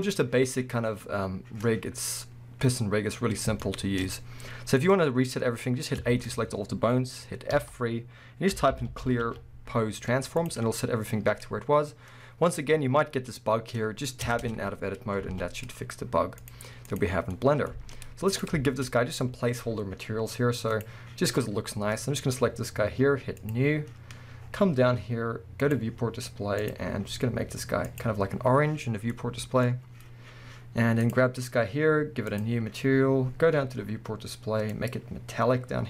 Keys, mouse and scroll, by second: 3.6 shift+middle click, 6.0 a, 7.6 F3, 10.8-11.7 scroll down 1, 11.7-12.7 middle drag, 11.7-12.7 scroll up 2, 13.3-16.4 middle drag, 13.3-14.1 scroll up 1, 14.3 Tab, 14.9 scroll down 1, 15.3 alt+a, 16.4-17.4 drag, 17.2 scroll down 2, 17.4-18.3 middle drag, 17.7 alt+a, 18.3 click, 18.7-20.7 shift+middle drag, 18.9 scroll up 1, 20.7 click, 21.7-23.4 scroll up 1, 23.4-26.8 drag, 24.1-25.6 scroll down 2, 25.9-26.6 scroll down 2, 29.1-31.0 middle drag, 31.0 click, 32.3-35.8 drag, 33.0-34.5 scroll down 1.